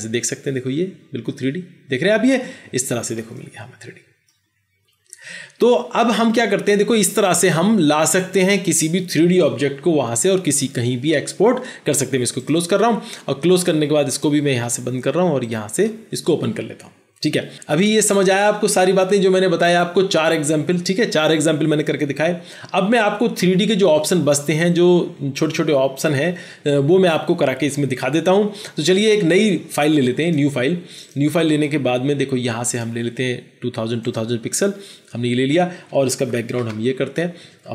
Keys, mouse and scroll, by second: 3.3 middle click, 36.5 alt+BackSpace, 37.5 alt+BackSpace.